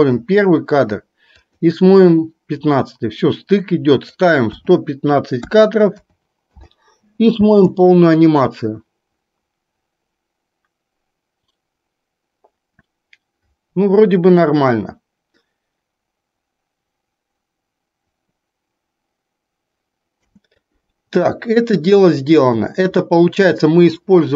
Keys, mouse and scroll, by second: 7.4 space, 20.3 space, 23.0-24.0 drag.